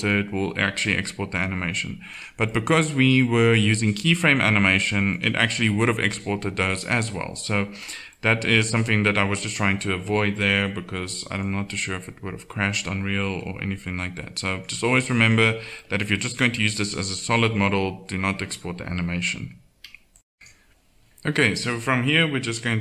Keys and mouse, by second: 1.7-4.9 drag, 5.1-6.7 drag, 7.3 middle click, 13.7 middle click.